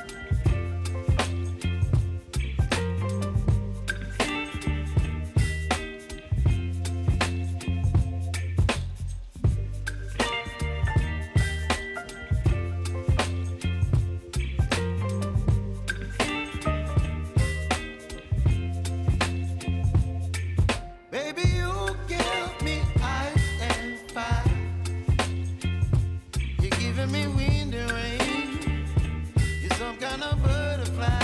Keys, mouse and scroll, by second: 2.9 ctrl+alt+Home, 4.5 click, 5.5-6.5 typing, 7.4-21.2 drag, 22.2 p, 22.9 click, 23.4 space, 26.1 space, 26.9-30.1 drag, 30.4 space.